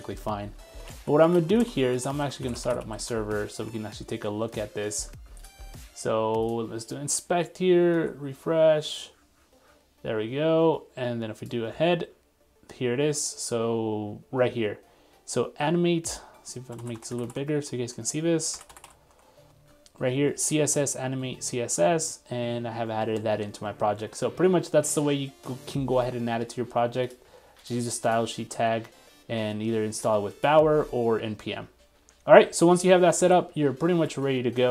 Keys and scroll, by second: 3.7 super+Tab, 4.5 super+1, 16.8 super+=, 17.3 super+=, 18.6 super+-, 23.6 super+2, 24.1 super+3, 32.3 super+2, 33.2 super+1.